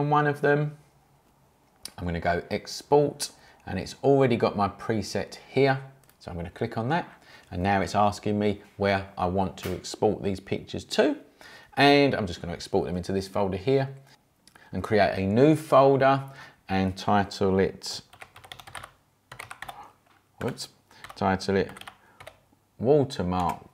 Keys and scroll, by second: 17.8-23.7 typing.